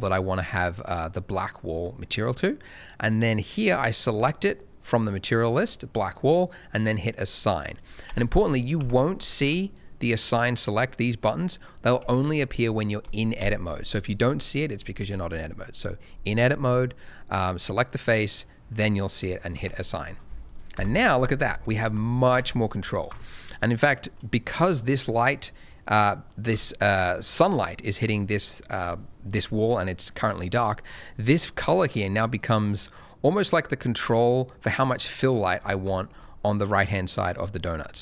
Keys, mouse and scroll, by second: 0.3 middle click, 4.0 click, 7.1 click, 8.0 Tab, 8.7 Tab, 9.3 Tab, 12.0 Tab, 13.4 Tab, 17.5 click, 19.5 Tab, 20.7 KP_0, 21.4 scroll down 1, 21.8 shift+middle click, 21.9-22.3 shift+scroll up 1, 22.3 alt+a, 25.1-25.6 scroll down 1, 25.7 middle click, 25.9 scroll up 1, 26.4 middle click, 30.8 click, 36.1 shift+scroll up 1, 37.3 click.